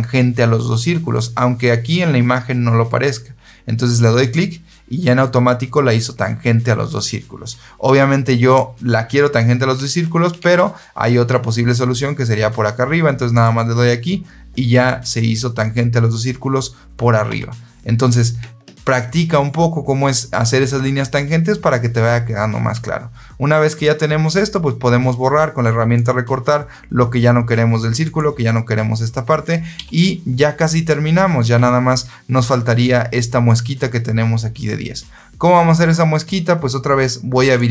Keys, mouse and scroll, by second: 4.1 click, 10.3 ctrl+z, 13.3 click, 17.2 Escape, 25.8 click, 27.9 click, 29.7 Escape, 37.5 click.